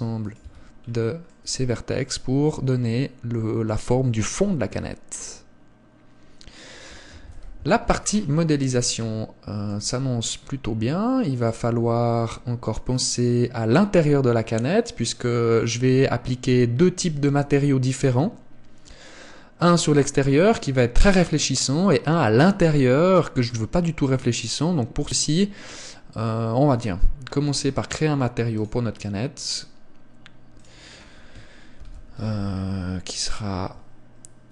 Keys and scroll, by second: 0.6 Tab, 7.5 KP_1.